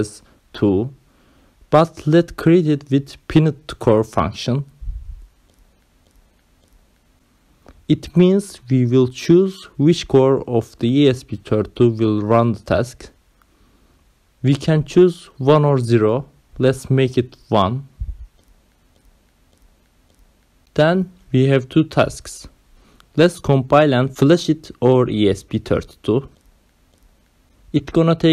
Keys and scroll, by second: 0.7 ctrl+v, 5.5 BackSpace, 5.7 2, 5.9 Right, 7.6 BackSpace, 7.8 2, 8.0 Left, 9.7 Right, 10.4-14.8 typing, 17.1 2, 18.2 space, 18.7 ,, 19.5 1, 22.1 ctrl+s, 27.8-28.3 typing.